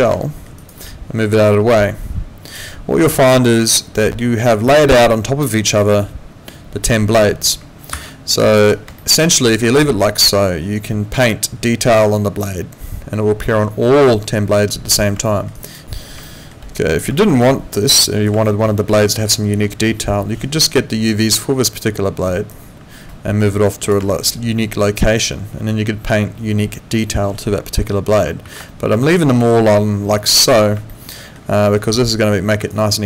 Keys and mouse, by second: 0.2 alt+middle click, 0.6 alt+right click, 1.7 click, 7.9 ctrl+a, 9.0 alt+middle click, 9.4 alt+right click, 15.3 alt+middle click, 15.6 alt+right click.